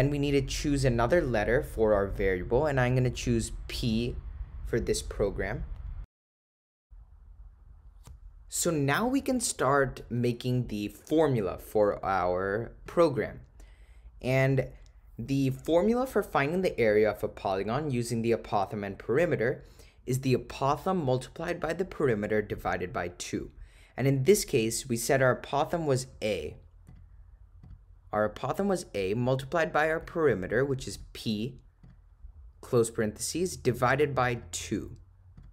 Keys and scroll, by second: 0.8 ,, 4.0 8, 12.9 Return, 24.1 (, 31.0 8, 31.9 ), 34.4 ÷, 35.4 2.